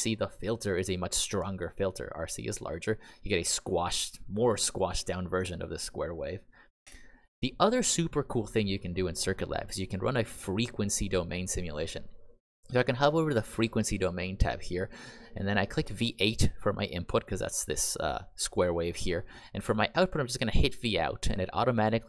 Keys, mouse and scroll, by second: 6.8 Escape, 16.1 click, 20.5 click.